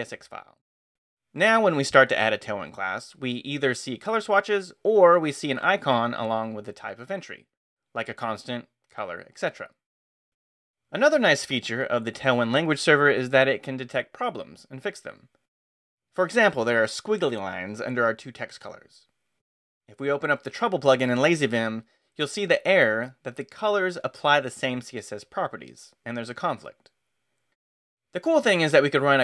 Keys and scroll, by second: 0.0-3.5 typing, 8.1 ctrl+n, 11.5 ctrl+n, 12.4 ctrl+Return, 13.4 Escape, 20.2 space, 20.4 x, 28.1 space, 28.4 x.